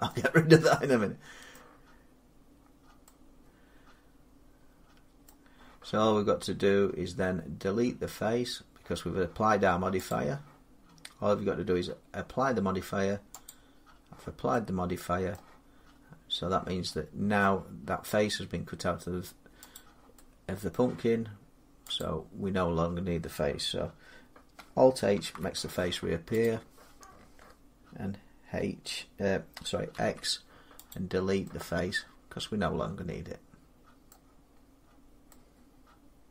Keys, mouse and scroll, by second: 0.2 middle click, 0.3 middle click, 1.4 middle click, 1.8 middle click, 1.9 middle click, 2.5 middle click, 4.5 scroll down 5, 5.1 middle click, 9.9 click, 13.3 click, 15.2 middle click, 17.3 middle click, 19.6 click, 20.6 middle click, 21.8 click, 24.9 alt+h, 26.3 click, 29.8 x, 30.7 click, 33.9 middle click, 34.4 middle click, 34.6 middle click.